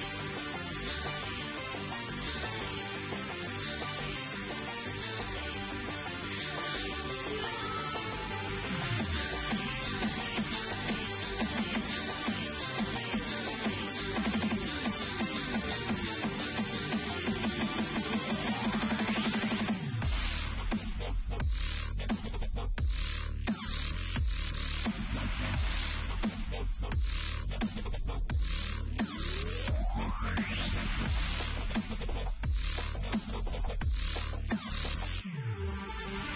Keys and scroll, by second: 11.6 m, 13.4 ctrl+c, 13.7 ctrl+w, 14.2 ctrl+v, 15.6-18.0 typing, 19.2 ctrl+t, 21.0 Return, 21.9 ctrl+t, 22.6 Return, 25.2-25.9 typing, 27.7 typing, 30.9 v, 32.5 ctrl+t, 34.1 Return, 36.0 e.